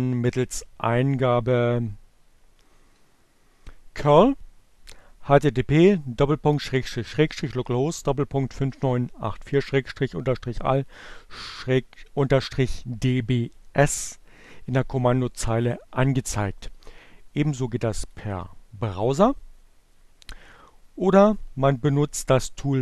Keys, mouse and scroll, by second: 1.7 Up, 14.6 Return, 17.7 click, 20.8 click.